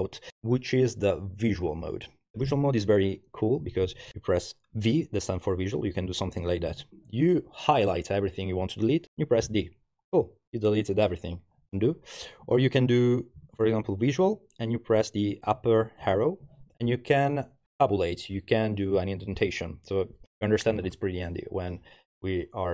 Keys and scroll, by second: 3.6 v, 5.9 Page_Down, 6.1 Page_Down, 6.2 Page_Down, 6.4 Page_Down, 6.7 Page_Down, 9.5 d, 11.9 u, 12.8 Down, 13.4 v, 13.6 Down, 13.8 Down, 14.1 Down, 16.0 shift+<.